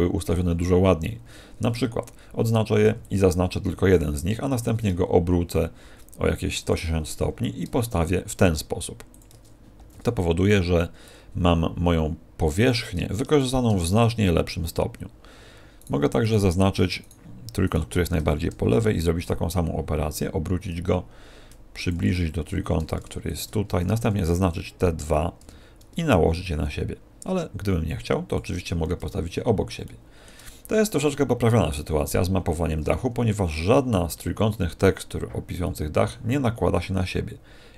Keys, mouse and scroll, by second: 1.2 a, 6.7 ctrl+click, 7.1 g, 9.1 ctrl+click, 9.7 a, 10.5 b, 13.3 shift+right click, 15.7 right click, 16.1 right click, 16.9 shift+right click, 17.6 shift+right click, 18.5 r, 21.8 ctrl+click, 22.3 g, 23.3 ctrl+click, 23.6 a, 23.9 b, 25.5 g, 28.3 ctrl+click, 28.9-29.8 scroll down 2, 29.8 shift+middle click, 29.8-30.2 scroll down 1, 35.6 middle click.